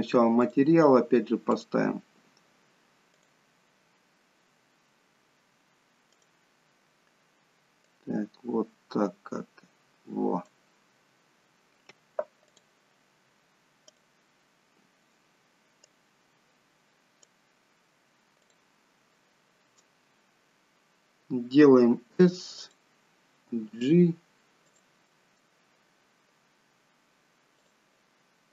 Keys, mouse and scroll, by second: 0.4 click, 1.6 click, 5.5 click, 6.2 click, 14.5 click, 22.0 s, 23.6 g, 25.1 middle click, 27.7 click.